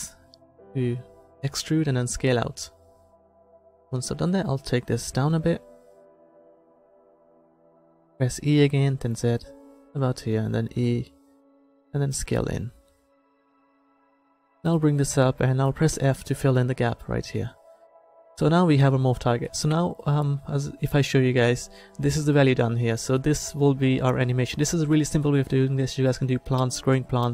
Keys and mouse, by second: 4.0-7.3 drag, 8.4 e, 10.7 e, 14.7-16.8 drag, 16.0 f, 18.1 Tab, 19.1-21.4 drag.